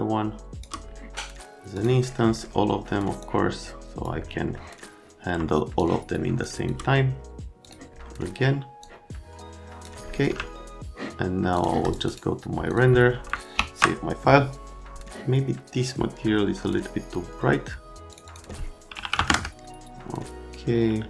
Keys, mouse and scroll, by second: 1.7 middle click, 3.2 click, 4.5 middle click, 5.7 shift+click, 7.6 click, 8.8 click, 10.1 z, 13.5 s, 18.9 KP_1, 19.0 KP_5, 19.1 KP_0, 19.3 KP_Enter.